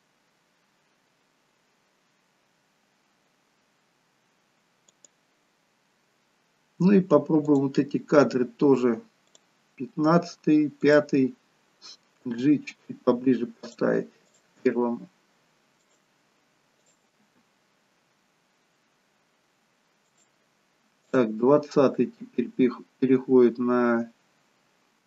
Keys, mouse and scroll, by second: 5.0 click, 7.5 click, 10.9 click, 12.4 g, 14.3 click, 14.6 g, 16.9 click, 17.3 g, 21.1 click, 21.6 g.